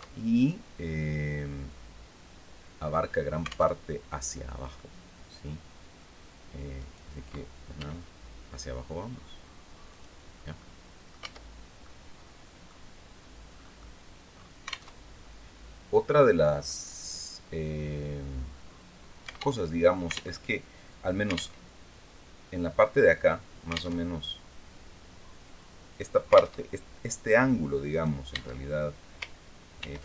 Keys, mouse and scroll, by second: 3.2 alt+Tab, 3.6 alt+middle click, 6.2 right click, 7.2 e, 9.4 click, 9.8 scroll down 1, 10.1 middle click, 10.7 Tab, 11.0 scroll down 1, 11.3 middle click, 12.2 scroll up 2, 12.6-12.9 scroll down 2, 13.1 middle click, 13.8 scroll up 2, 14.4 alt+Tab, 19.1 alt+Tab, 19.9 alt+Tab, 21.1 alt+Tab, 23.4 alt+Tab, 26.1 alt+Tab, 27.4 right click, 27.8 Tab, 29.2 ctrl+r.